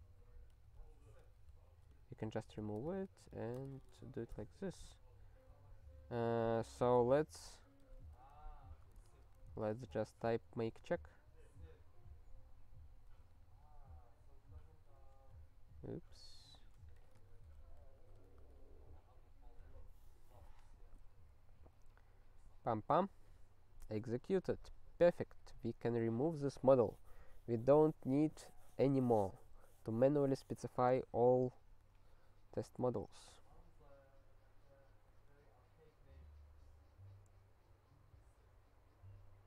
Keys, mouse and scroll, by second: 24.7 super+o, 34.8 click, 35.1 click.